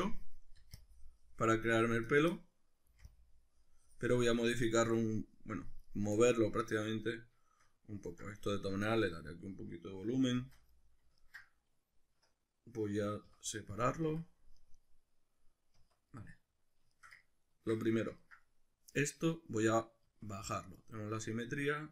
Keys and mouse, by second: 0.0-2.2 middle drag, 0.6 c, 2.2 right click, 2.3-5.9 middle drag, 2.9 c, 5.9 right click, 6.2-10.9 middle drag, 10.4 shift+d, 10.9 right click, 11.2-14.6 ctrl+middle drag, 13.3 p, 14.1 Tab, 14.6 right click, 14.8 right click, 15.8 Tab, 16.2-21.9 middle drag, 20.1 Tab.